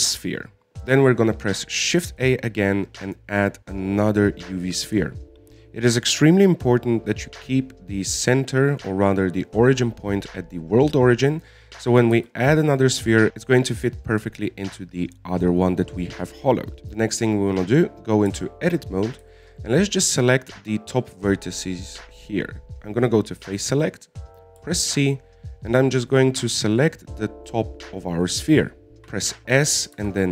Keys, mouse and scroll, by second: 3.4 shift+a, 6.0-9.0 middle drag, 12.5-18.5 middle drag, 18.5-19.7 scroll up 1, 19.7 Tab, 20.4 scroll up 2, 20.7-23.6 shift+middle drag, 23.6 click, 25.1 right click, 28.6 middle click, 29.1 middle click, 29.4 middle click.